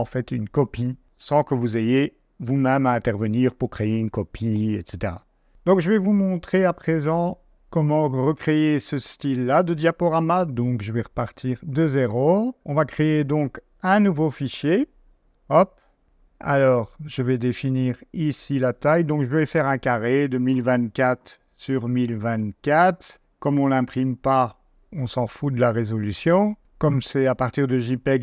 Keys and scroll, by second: 19.2 1, 19.7 2, 20.9 Tab, 21.4 ], 22.0 ], 22.7 4.